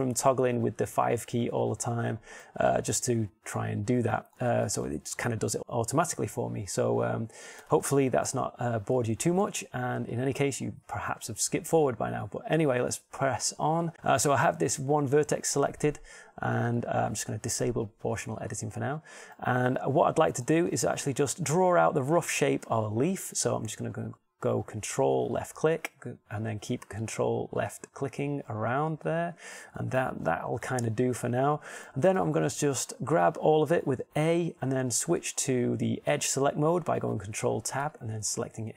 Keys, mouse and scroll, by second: 0.9 KP_5, 1.4 KP_5, 1.7 KP_5, 2.1 KP_5, 3.6 middle click, 4.5-5.6 middle drag, 8.2 KP_7, 10.2 g, 11.0 click, 11.9 click, 17.4-19.2 drag, 30.5 middle click, 33.4 a, 33.6 a, 35.7 ctrl+Tab.